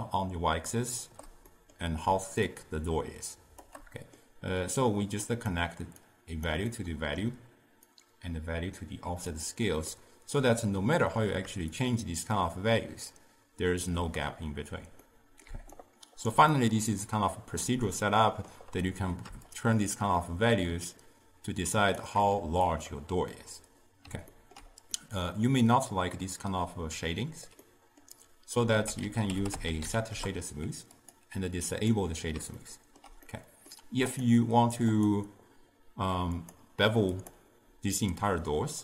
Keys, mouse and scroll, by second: 1.5-2.5 middle drag, 2.5-4.0 shift+drag, 4.0-4.8 middle drag, 4.8-6.8 drag, 6.8-8.0 middle drag, 8.0-10.0 drag, 10.0-11.9 middle drag, 11.9-15.0 shift+drag, 15.1-15.5 middle drag, 15.5 d, 15.8-16.6 right drag, 16.6-19.5 middle drag, 19.5-22.6 shift+drag, 23.4-28.8 middle drag, 28.8 ctrl+a, 31.8 click, 32.6-34.1 ctrl+middle drag, 34.1 click, 35.0 click, 36.4 click.